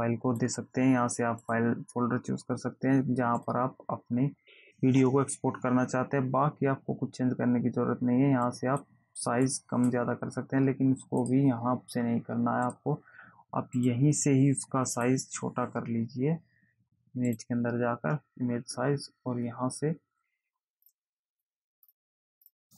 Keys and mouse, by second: 1.8 click, 3.7 click, 8.8 click, 11.6 click, 13.0 click, 14.1 click, 15.3 click, 17.7 click, 21.0 click, 22.0 click, 22.6 click.